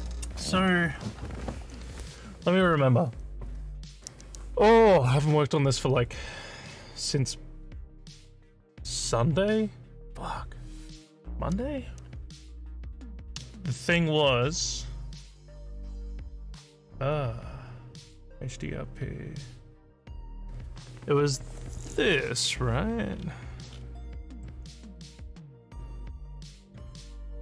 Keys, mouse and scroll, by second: 22.6 scroll up 1, 23.1 scroll up 1, 23.7 scroll up 6.